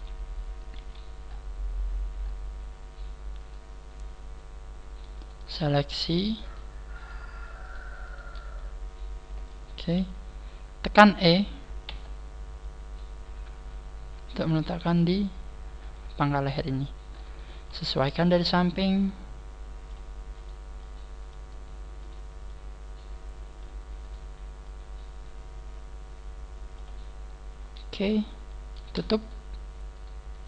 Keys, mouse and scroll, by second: 0.7 KP_3, 1.2 scroll down 2, 1.8-2.4 scroll up 5, 2.8 scroll up 1, 3.1 a, 3.1 KP_3, 3.4 right click, 3.4 scroll up 1, 5.6 shift+right click, 6.0 shift+right click, 6.4 shift+right click, 7.0 shift+right click, 7.6 shift+right click, 8.5 shift+right click, 8.5 middle click, 9.6 middle click, 9.8 scroll down 3, 9.9 KP_3, 10.6 scroll up 2, 11.8 e, 15.9 click, 17.0-17.4 scroll down 4, 17.4 shift+middle click, 18.0 scroll up 3, 18.6 right click, 19.1 click, 20.4 right click, 20.8 click, 22.0 right click, 22.6 click, 27.5-28.1 scroll up 1, 28.1-28.5 scroll up 4, 28.8 right click, 29.2 shift+right click, 29.9 shift+right click, 30.3 shift+right click.